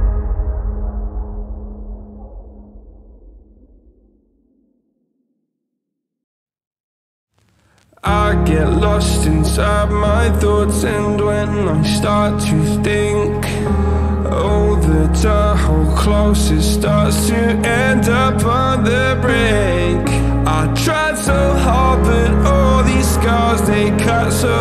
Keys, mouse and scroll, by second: 7.6 g, 10.9-24.6 drag.